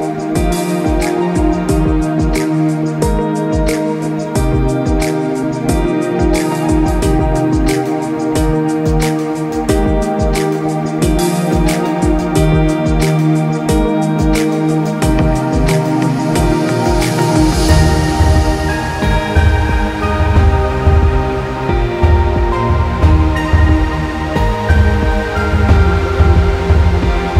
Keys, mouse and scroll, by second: 2.6 right click, 4.9 click, 5.2 right click, 6.0 click, 6.4 right click, 7.0 click, 8.6 Up, 10.9 Left, 11.7 Up, 14.2 click, 17.7 right click, 18.3 click, 19.2 Up, 21.4 click, 23.5 KP_5, 23.6 KP_0, 23.7 KP_Enter, 24.3 click, 26.3 KP_7, 26.4 KP_5, 26.5 KP_Enter, 27.1 click.